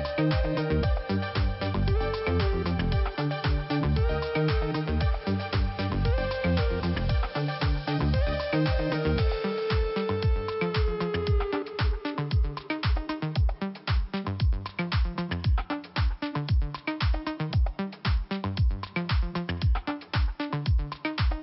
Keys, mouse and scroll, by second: 1.6 click, 1.7 click, 6.3 click, 7.8 click, 8.0 click, 9.5 click, 12.9 click, 13.0 click, 19.9 click, 20.9 click.